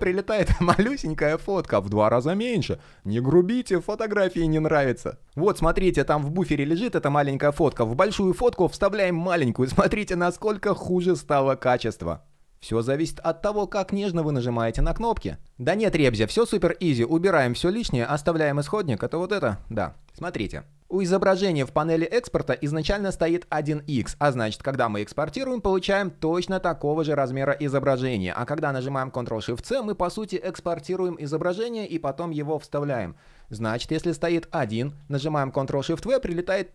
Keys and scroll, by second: 8.6 super+v, 10.5 super+z, 34.8 shift+super+c, 35.7 super+v.